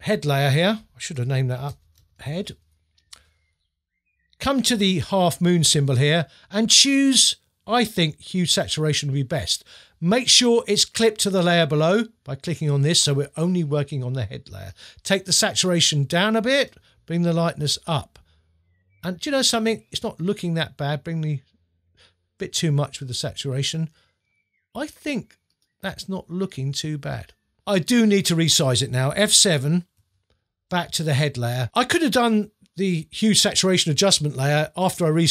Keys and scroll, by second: 1.7 shift+h, 2.0 shift+e, 2.5 Return, 30.0 F7.